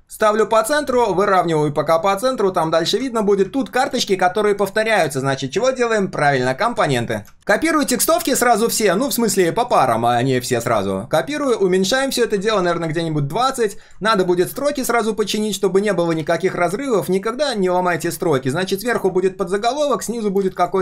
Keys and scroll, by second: 8.2 ctrl+c, 10.6 ctrl+v, 11.4 ctrl+a, 16.2 ctrl+x, 18.9 ctrl+v.